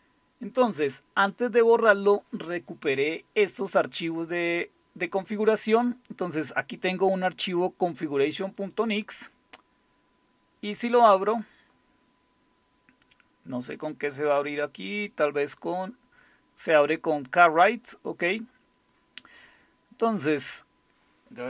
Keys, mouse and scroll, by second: 4.2 click, 5.7 click, 8.6 click, 17.5 click, 19.2-20.5 scroll down 1.